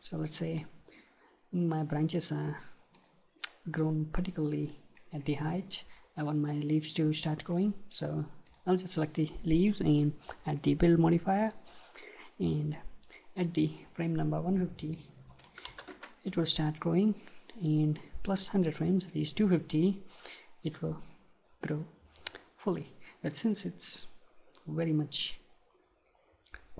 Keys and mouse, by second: 3.1-5.0 drag, 5.0-7.1 middle drag, 8.5-15.9 drag, 21.8-23.5 right drag.